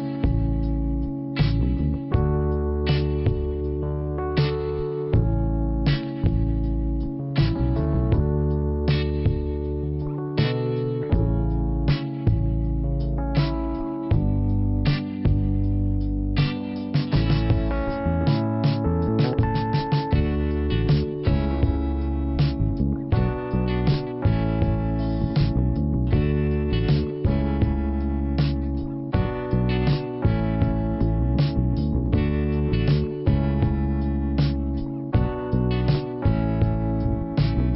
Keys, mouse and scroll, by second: 1.6 scroll up 1, 2.0 click, 2.0 click, 6.4 shift+Return, 12.2 click, 12.3 click, 13.3 click, 17.1 click, 17.2 click, 18.5 click, 21.6 right click, 21.8 click, 23.4 middle click, 24.3 click, 25.4 click, 31.7 middle click, 36.3 middle click, 37.2 click, 37.3 click.